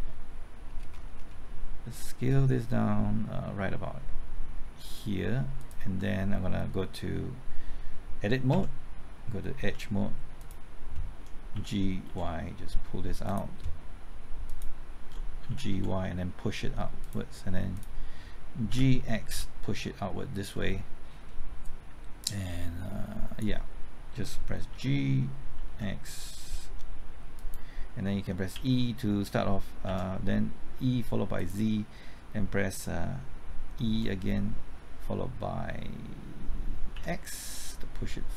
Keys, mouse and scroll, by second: 0.6-1.0 scroll up 1, 1.8 s, 4.8-5.6 scroll up 1, 5.6 click, 8.5 Tab, 9.6 2, 10.4 click, 11.5-12.5 typing, 13.2 click, 15.2-16.2 typing, 17.0 click, 18.7-19.3 typing, 20.4 click, 24.7-25.7 typing, 27.3 click, 28.5 typing, 29.6-30.3 typing, 31.3 click, 33.9 typing, 36.7-37.4 typing.